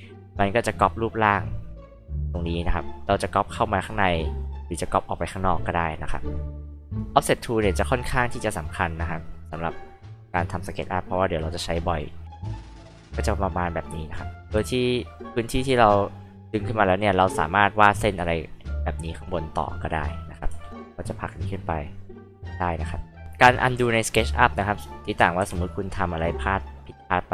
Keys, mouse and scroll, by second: 0.6 click, 3.0-4.1 drag, 4.3-5.8 drag, 8.4 click, 9.6 click, 10.8 click, 12.0 click, 12.9 click, 14.4 f, 15.1-17.4 drag, 18.4-19.7 drag, 20.5 p, 20.7 click, 21.6-22.8 drag, 23.2 click, 25.4 r, 25.5 click, 26.1 click, 27.0 click.